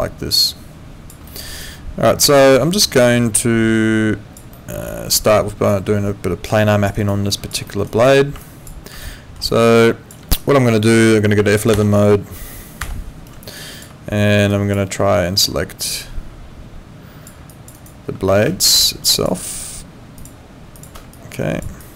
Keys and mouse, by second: 1.2 alt+middle click, 1.6 alt+click, 4.5 alt+middle click, 4.9 alt+click, 6.9 alt+right click, 7.3 alt+click, 7.7 alt+middle click, 7.9 alt+right click, 8.4 alt+click, 9.0 alt+middle click, 9.5 alt+click, 11.7 F12, 12.8 F11, 13.5 alt+click, 17.5 alt+click, 17.7 alt+right click, 21.1 alt+click.